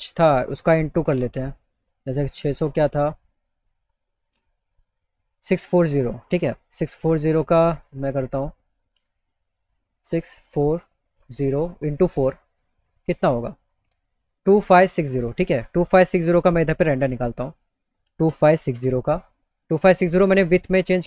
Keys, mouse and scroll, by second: 1.5 click, 2.8 click, 4.3 click, 7.5 click, 9.5 click, 10.0 click, 10.9 click, 11.5 click, 12.0 click, 12.8 click, 15.5 click, 16.6 click, 17.6 KP_2.